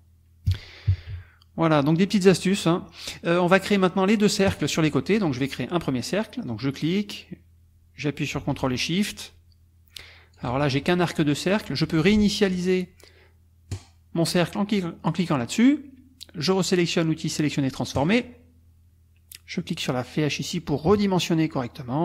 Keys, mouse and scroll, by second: 0.5 KP_Subtract, 1.8 click, 2.2 click, 4.5 click, 6.5 click, 13.7 click, 18.0 click, 20.7-22.0 ctrl+shift+drag.